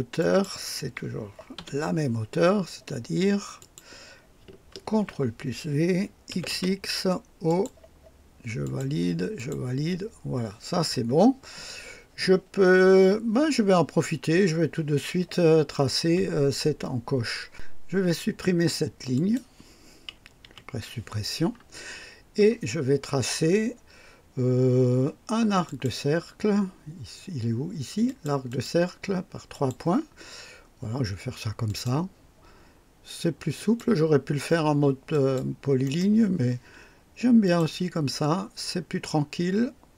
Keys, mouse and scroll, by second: 0.1 click, 1.5 typing, 3.5 click, 4.9 ctrl+v, 4.9 ctrl+v, 6.3-7.8 typing, 7.4 click, 8.6 click, 9.3 click, 19.1 click, 20.4 Delete, 20.4 Delete, 25.6 click, 28.0 click, 28.4 click, 29.5 click, 31.6 click, 33.5 click, 35.1 click, 35.8 right click, 37.4 click.